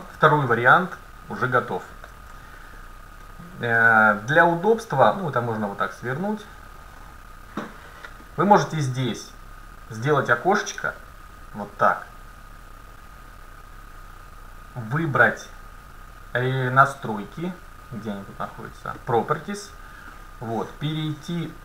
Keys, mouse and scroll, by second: 4.3-6.2 drag, 6.5-8.4 drag, 8.3 middle click, 10.0-11.8 drag, 14.9-16.7 drag, 20.1-21.6 scroll down 3.